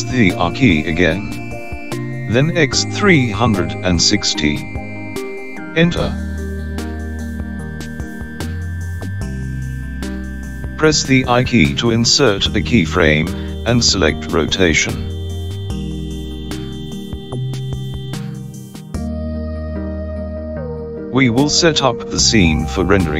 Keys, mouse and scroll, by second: 4.8 r, 11.5 i, 15.7 space, 19.6 space.